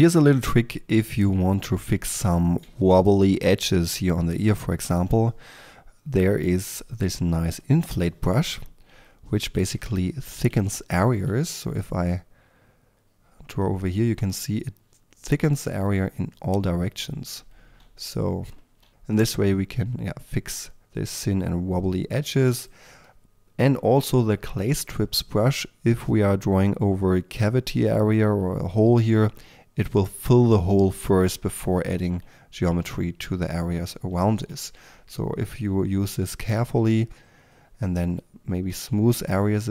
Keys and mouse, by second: 5.6-8.2 drag, 9.2 middle click, 9.5 f, 10.1-10.5 drag, 10.5 f, 12.0-13.3 drag, 12.0 f, 14.8-23.0 drag, 24.0-25.0 drag, 25.0 f, 28.1 f, 34.8-35.6 middle drag, 35.6-39.7 drag.